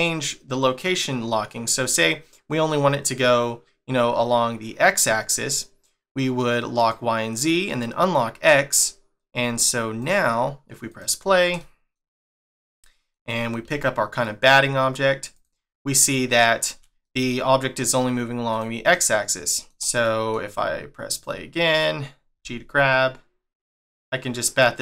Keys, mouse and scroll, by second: 6.7 click, 7.6 click, 9.9 click, 10.9 click, 11.6 shift+middle click, 12.3 click, 12.7 middle click, 13.6 g, 15.8 scroll down 1, 16.3 shift+middle click, 16.9 g, 17.0 middle click, 17.6 scroll down 1, 18.5 scroll down 1, 18.5 click, 18.8 click, 19.5 middle click, 21.1 click, 22.3 g.